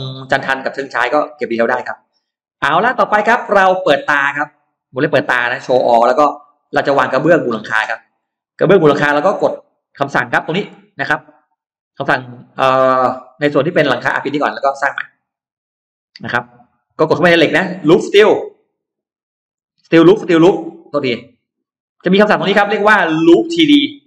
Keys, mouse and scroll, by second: 0.3 scroll down 1, 1.1-1.8 scroll down 1, 1.7 middle click, 2.6-3.4 scroll down 1, 3.5 middle click, 5.3 click, 6.0-6.8 scroll up 4, 6.8 middle click, 7.3-8.3 scroll down 4, 8.3 middle click, 8.7 scroll down 2, 9.3 scroll up 2, 10.1 scroll up 2, 14.4 click, 15.5 click, 19.4 click, 20.7 click.